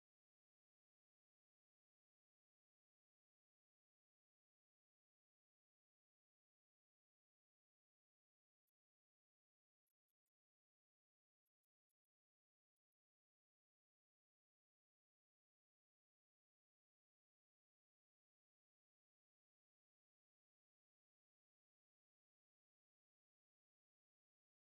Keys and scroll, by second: 1.2 ctrl+g, 4.3 ctrl+g, 4.5 ctrl+d, 4.7-10.0 typing, 12.7 ctrl+z, 14.0-16.3 typing, 17.7 ctrl+z, 18.7 ctrl+d, 18.9 ctrl+z, 19.5 ctrl+z, 20.1 ctrl+g, 24.4 ctrl+z.